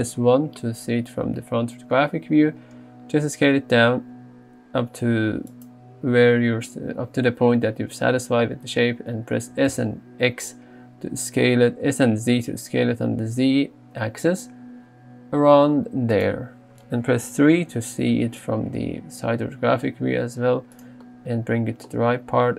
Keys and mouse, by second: 0.0 KP_1, 2.4 s, 9.7 s, 9.8 z, 17.3 KP_3, 19.5 g.